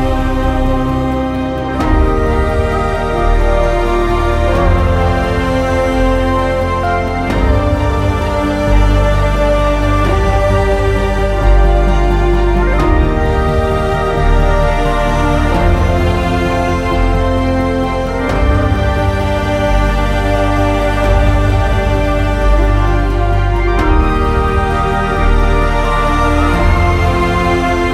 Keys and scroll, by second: 1.0 alt+x, 1.9 m, 9.5 typing, 11.9-12.6 typing.